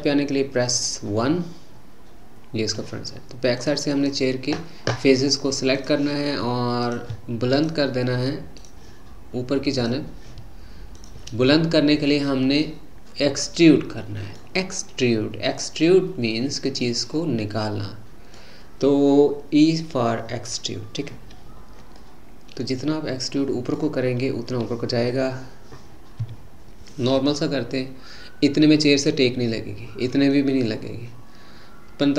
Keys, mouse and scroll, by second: 1.2-3.6 middle drag, 3.6 click, 3.9 click, 5.7 click, 7.5 shift+click, 8.6 shift+click, 9.7 shift+click, 11.0 shift+click, 12.6-15.7 middle drag, 16.8-20.0 middle drag, 21.5-22.0 scroll down 2, 22.0-25.2 middle drag, 26.3 e.